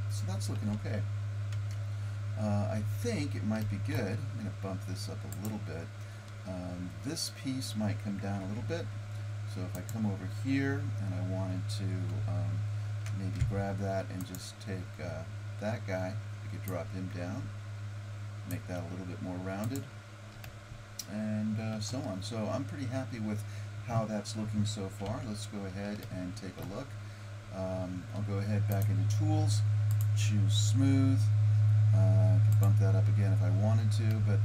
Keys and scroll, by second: 1.6 Tab, 8.5 Tab, 25.1 Tab.